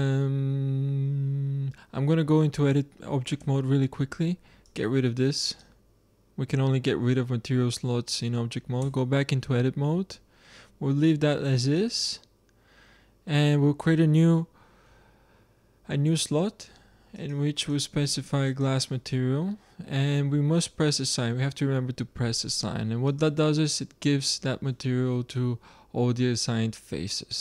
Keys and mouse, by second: 3.3 Tab, 4.6-7.2 drag, 8.7 Tab, 11.7-13.5 drag, 17.1-19.3 drag, 23.0-24.7 drag, 24.9-27.4 middle drag.